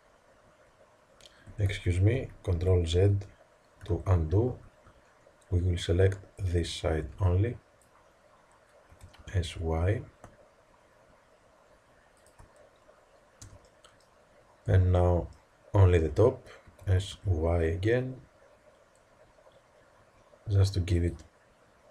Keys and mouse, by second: 1.7 ctrl+z, 2.1 ctrl+z, 2.5 ctrl+z, 2.9 ctrl+z, 4.5 a, 5.4 b, 7.0 b, 8.8 s, 13.3 b, 14.6 b, 16.6 s.